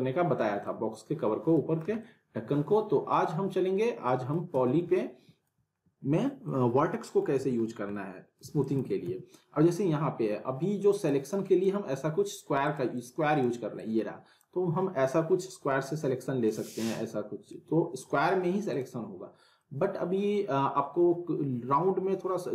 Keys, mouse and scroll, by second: 0.6-1.9 alt+middle drag, 4.5 z, 4.9-5.6 alt+middle drag, 7.3 z, 7.6 scroll down 1, 7.9-8.5 alt+middle click, 8.4 alt+w, 8.6 alt+right click, 8.7 alt+w, 9.0 z, 11.0-11.7 click, 12.1 scroll down 1, 13.7-14.4 drag, 19.0 scroll up 1, 19.6 middle click.